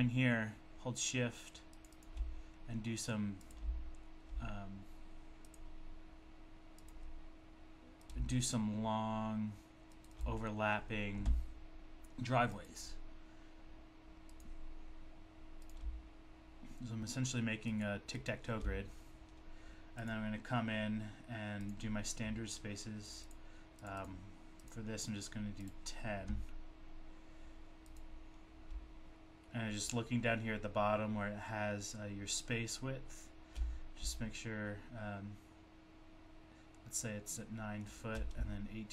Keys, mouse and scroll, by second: 1.7 click, 3.4 double click, 5.5 click, 8.0 click, 9.9 shift+click, 10.1 shift+double click, 10.1 shift+double click, 15.7 click, 18.2 shift+double click, 20.0 double click, 21.7 click, 23.3 double click, 23.8 double click, 24.0 double click, 24.7 click, 25.7 click, 37.9 shift+click.